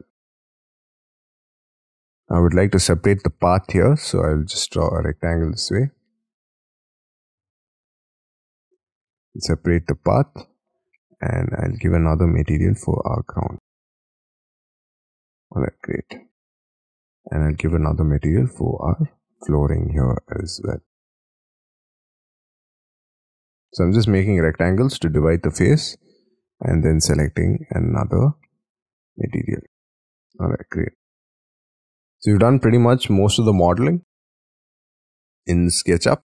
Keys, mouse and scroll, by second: 0.1 scroll up 4, 0.4 scroll down 4, 0.7 scroll up 7, 1.9-2.4 scroll up 9, 2.4 j, 2.8 j, 3.4 r, 5.0 scroll down 5, 6.3 scroll down 5, 7.3 j, 8.7 j, 9.0 space, 14.9 space, 15.1 Escape, 15.2 middle click, 15.3 Escape, 15.3 space, 15.5 Escape, 15.6 scroll up 6, 15.8 middle click, 16.3 j, 16.6-17.0 scroll up 5, 16.8 r, 18.6-19.1 scroll down 6, 19.5-19.9 scroll down 1, 19.9 middle click, 20.3-20.8 scroll down 6, 21.3 middle click, 23.7 middle click, 24.5 middle click, 24.7 middle click, 24.7 space, 25.0 scroll up 4, 26.5-29.8 scroll down 1, 29.8 middle click, 30.0 Escape, 30.2 middle click, 30.6-30.9 scroll up 4, 30.9 scroll down 14, 31.5 middle click, 34.5-36.1 scroll up 19.